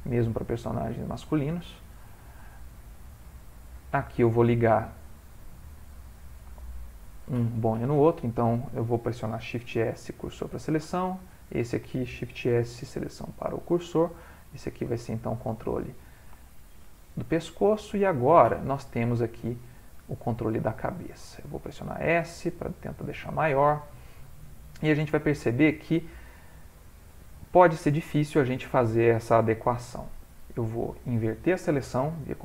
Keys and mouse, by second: 0.8 click, 2.0 click, 2.4 g, 3.3 ctrl+middle click, 4.1 click, 4.4 g, 5.5 click, 6.6 shift+click, 8.1 click, 9.6 shift+s, 11.3 click, 12.3 shift+s, 14.2 click, 14.5 g, 16.5 shift+middle click, 16.9 shift+middle click, 17.8 ctrl+middle click, 18.5 click, 19.5 g, 21.2 s, 23.4 g, 26.3 ctrl+middle click, 26.4 ctrl+middle click, 26.8 middle click, 32.3 ctrl+i.